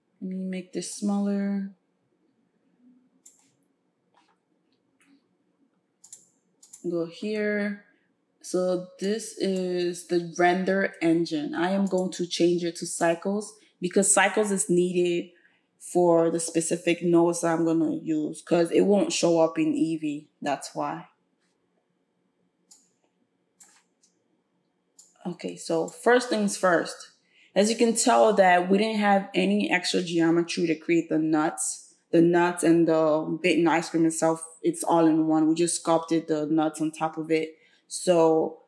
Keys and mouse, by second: 9.0-38.6 drag.